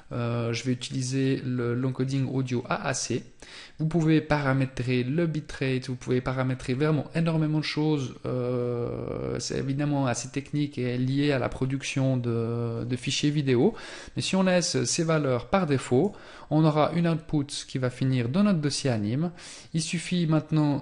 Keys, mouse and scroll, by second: 13.3 click, 17.6 click.